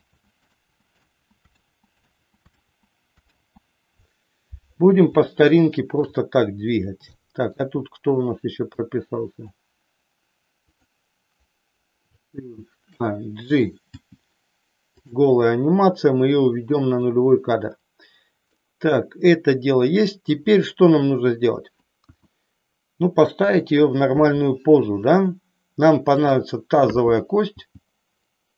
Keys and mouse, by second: 0.0 ctrl+z, 0.5 ctrl+z, 1.1 ctrl+z, 1.5 ctrl+z, 2.1 ctrl+z, 2.8 ctrl+z, 3.4 ctrl+z, 5.4 middle click, 7.1 middle click, 8.9 click, 10.6 click, 14.0 g, 15.0 click, 16.4 click, 18.5-20.4 middle drag, 22.0 KP_1, 23.2 KP_3, 26.1 click, 27.5 g.